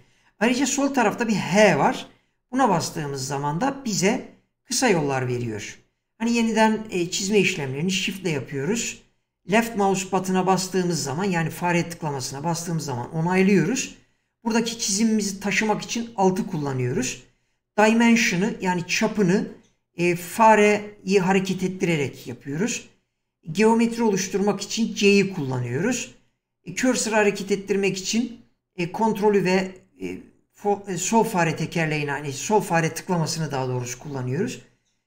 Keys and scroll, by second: 2.6 h.